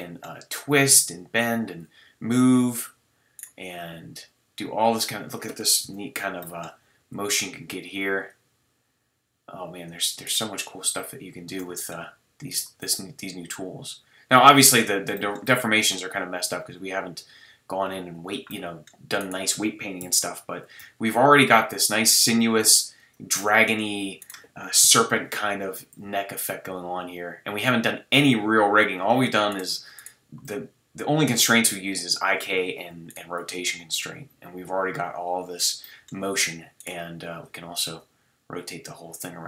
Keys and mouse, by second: 0.1-2.3 drag, 1.8 g, 2.8-3.4 drag, 3.8 g, 5.0 click, 5.8 KP_3, 7.0 g, 11.8-14.1 middle drag, 12.8 g, 16.2 g, 18.5 middle drag, 18.5 click, 18.6-19.2 drag, 19.2 middle click, 19.7 click, 20.0 KP_7, 20.0 middle click, 20.1 click, 20.8 g, 24.8 KP_3, 25.8 middle click, 26.0 g, 29.0-29.5 drag, 30.4 g, 31.6-32.7 drag, 33.4 g, 35.8-38.5 middle drag.